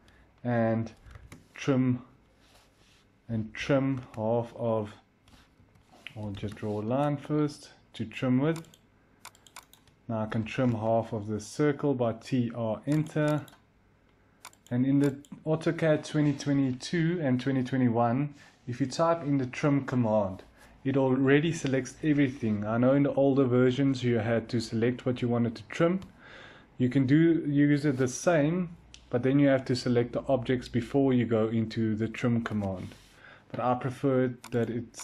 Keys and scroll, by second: 0.9-1.5 typing, 2.9-4.0 typing, 5.5 Escape, 6.1-7.8 typing, 10.0-10.9 typing, 32.3 Delete.